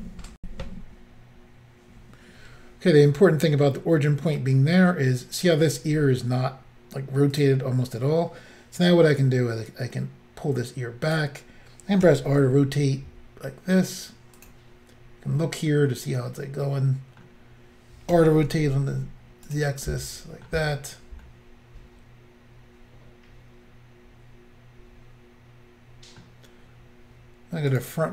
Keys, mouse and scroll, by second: 0.4 Insert, 3.7 middle click, 7.4 click, 7.4 click, 9.7 click, 12.1-12.4 typing, 14.4 click, 14.5 click, 15.9 middle click, 18.2-19.5 typing, 19.5 click, 19.9 middle click, 21.3 middle click, 27.8 click.